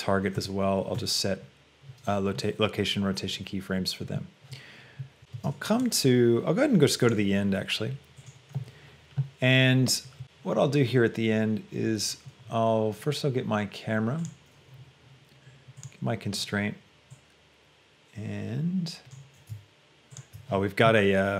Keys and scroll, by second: 5.6 space.